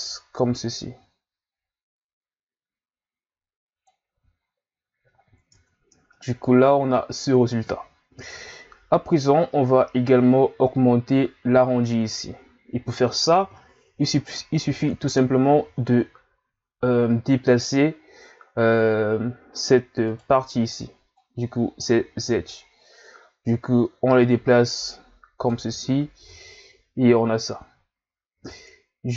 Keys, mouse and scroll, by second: 4.2 z, 4.5-5.3 scroll down 3, 5.3-5.6 scroll down 1, 5.6 Tab, 6.1-9.2 middle drag, 13.4 KP_1, 14.2-14.6 scroll up 1, 14.6 Tab, 15.3-15.7 scroll up 1, 15.7 z, 20.1 right click, 20.5 b, 22.5 click, 25.7 z, 26.3 Tab, 27.9-28.3 shift+scroll down 2, 28.3 Tab.